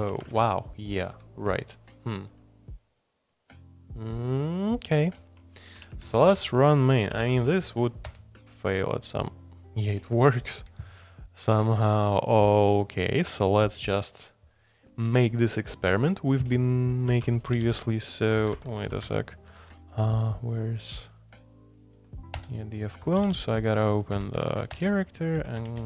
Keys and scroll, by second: 0.0 Escape, 0.3 ctrl+u, 1.1 ctrl+u, 2.3 ctrl+u, 3.8 typing, 4.8 ctrl+d, 5.0 ctrl+d, 5.7-8.1 typing, 17.1 Escape, 17.2-19.7 typing, 18.4 ctrl+g, 19.0 Escape, 21.9 j, 22.3 Return, 23.0-25.8 typing.